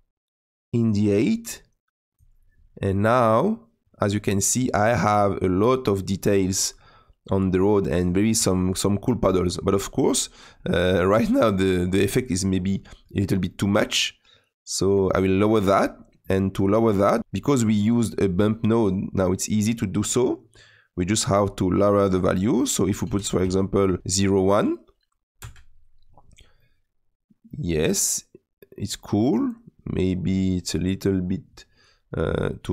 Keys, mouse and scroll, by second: 2.2 click, 5.2-16.5 middle drag, 16.5-26.2 drag, 26.5-29.7 middle drag.